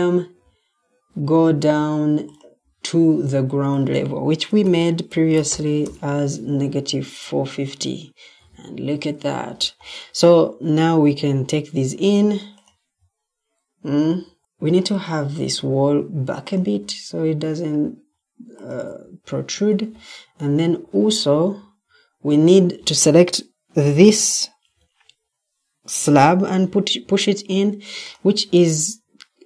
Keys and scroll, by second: 4.5-5.9 typing, 8.5 Escape, 14.0 Escape, 19.6 Escape.